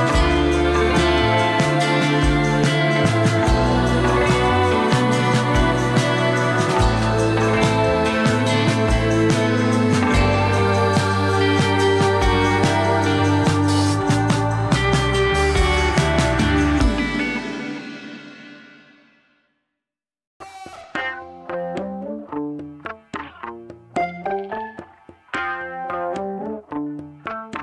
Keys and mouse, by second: 0.0-1.8 g, 2.3 click, 2.9 g, 3.1 ctrl+z, 3.9 g, 4.9 click, 6.2 e, 9.0 ctrl+click, 9.4 click, 10.4 g, 11.7 ctrl+KP_Add, 12.0 ctrl+KP_Add, 12.2 ctrl+KP_Add, 12.4 ctrl+KP_Add, 12.6 ctrl+KP_Add, 12.7-13.1 ctrl+KP_Add, 13.5 ctrl+KP_Add, 14.8 3, 16.8 click, 17.5 click, 17.9 ctrl+click, 18.5 ctrl+click, 20.7 f, 21.1 click, 22.0 f, 22.2 alt+q, 22.8 click, 24.2 click, 24.2 f, 24.9-25.9 shift+drag, 26.2 f, 26.6 ctrl+z, 27.1 i, 27.3 click, 27.5 g.